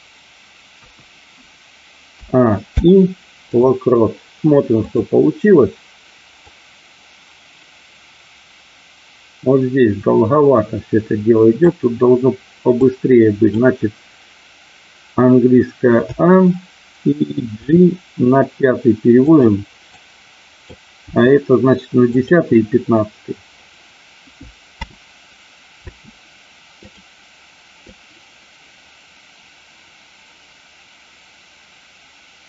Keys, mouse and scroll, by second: 0.7 KP_1, 2.2 a, 2.6 i, 4.7 click, 6.5-11.6 drag, 12.7 click, 15.9 a, 17.6 g, 19.2 click, 19.8 click, 21.1 g, 22.1 click, 24.7 space, 25.7 space, 26.7 click, 27.8-32.4 drag.